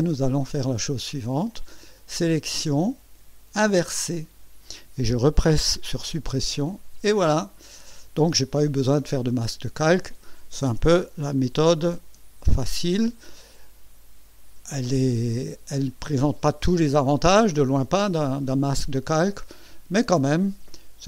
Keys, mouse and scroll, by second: 2.3 click, 3.6 click, 6.2 Delete, 12.5 ctrl+shift+a.